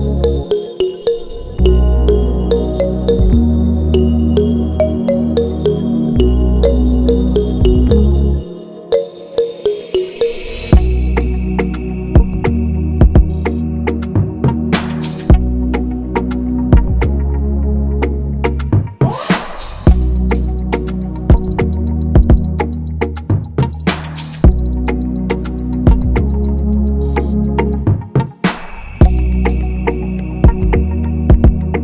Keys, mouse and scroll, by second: 4.4 click, 5.1 click, 5.3 click, 8.1 click, 8.3 click, 9.2 click, 25.7 click.